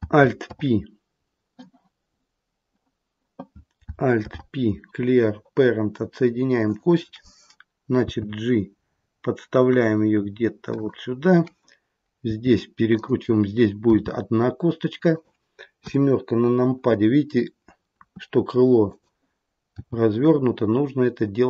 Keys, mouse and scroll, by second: 4.1 alt+p, 8.0 g, 12.3 r, 13.9 g, 15.7 KP_7, 17.9 r, 19.7 g.